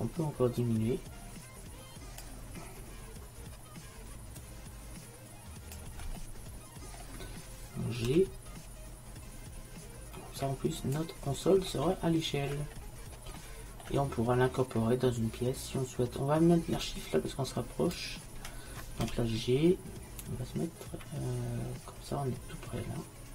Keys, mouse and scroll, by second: 0.7-6.4 drag, 8.1 g, 16.9-19.1 drag, 19.1 g.